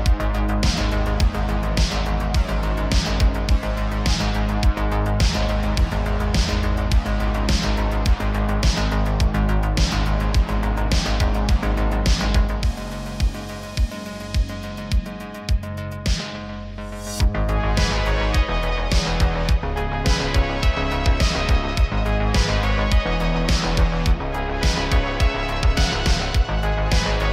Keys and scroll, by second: 0.7 s, 2.3 s, 2.5 z, 2.7 z, 5.5 g, 8.1 g, 12.7 s, 13.9-14.8 typing, 16.4 shift+d, 17.6 r, 17.7 r, 20.1 g, 22.9 shift+d, 25.8 s, 26.3 r, 26.4 r.